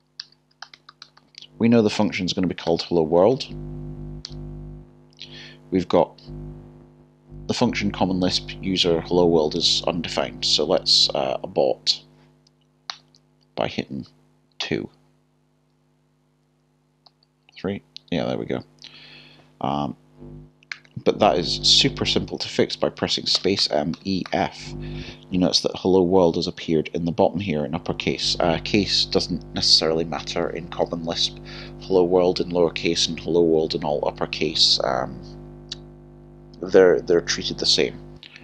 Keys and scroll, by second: 0.2 typing, 2.0 typing, 4.3 typing, 14.6 2.